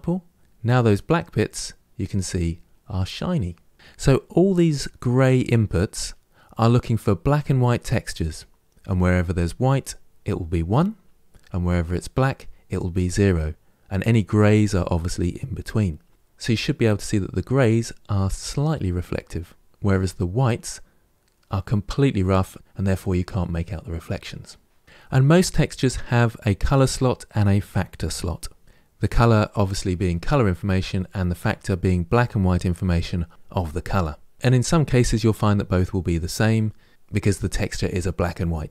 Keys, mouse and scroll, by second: 0.4-2.8 middle drag, 17.0-19.7 middle drag.